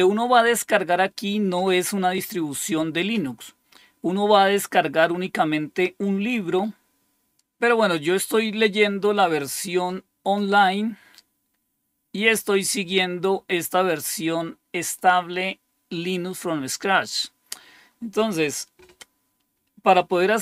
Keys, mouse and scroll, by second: 7.4 click, 11.1-12.9 scroll down 2, 14.8 click, 17.3-18.2 scroll down 2.